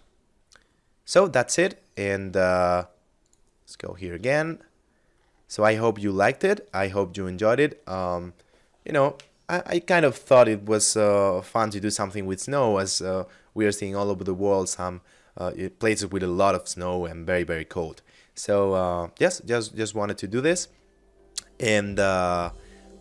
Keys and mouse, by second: 1.1 click, 3.7 middle click.